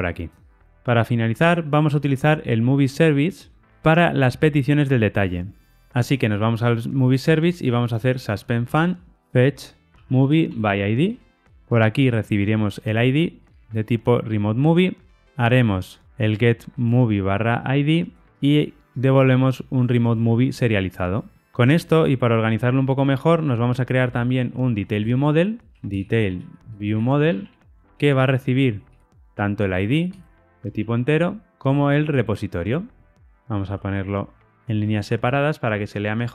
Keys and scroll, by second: 8.6 Tab, 13.4 Tab, 24.0 super+n, 31.7 Tab, 33.2 alt+Return.